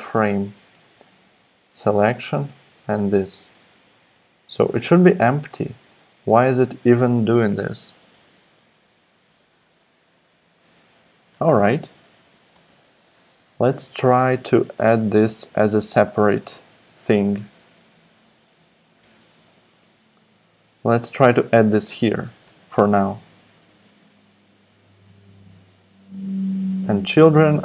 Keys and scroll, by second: 10.5 Return, 10.6 Return, 10.9 Up, 11.3 Tab, 12.2 Down, 12.5 Tab, 16.4 super+x, 16.8 BackSpace, 17.3 BackSpace, 17.5 BackSpace, 18.7 Down, 19.0 BackSpace, 20.4 BackSpace, 22.4 Return, 22.7 super+v, 25.3 Tab, 26.8 super+d.